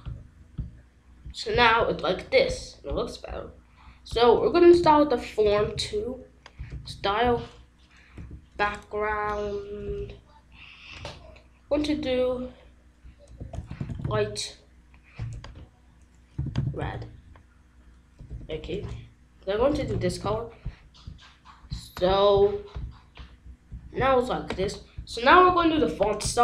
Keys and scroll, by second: 5.2-6.1 typing, 7.5 a, 8.9 c, 9.6 Down, 9.8 Return, 13.7-14.5 typing, 16.1-17.2 typing, 18.5 BackSpace.